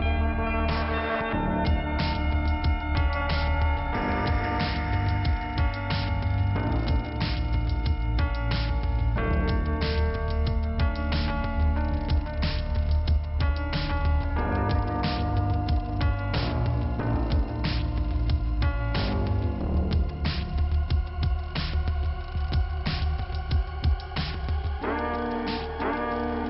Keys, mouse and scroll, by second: 1.7 click, 8.0 click, 9.0 click, 13.0 middle click, 15.3 middle click, 15.5 middle click, 16.1 scroll up 1, 17.2 click, 20.6 scroll down 1, 22.3 click, 26.1 click.